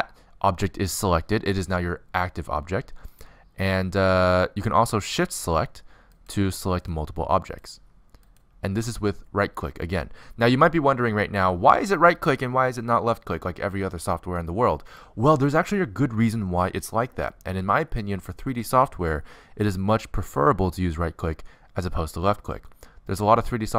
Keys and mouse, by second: 3.4-5.1 drag, 5.1 right click, 6.7-10.6 drag, 10.6 right click.